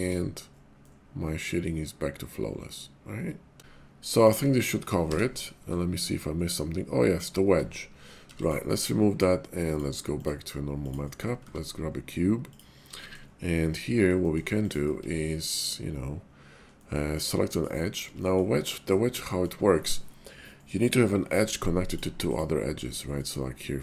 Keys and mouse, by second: 0.8-3.6 middle drag, 4.0 click, 4.4 Tab, 5.0 y, 7.5 Tab, 8.2 x, 9.7-11.1 drag, 11.4 shift+a, 13.0 shift+drag, 13.5 middle drag, 14.2 shift+click, 14.5 click, 14.9 Tab, 16.8 middle click, 18.2 shift+middle click, 18.6 middle click, 19.2 shift+middle click, 22.2 click.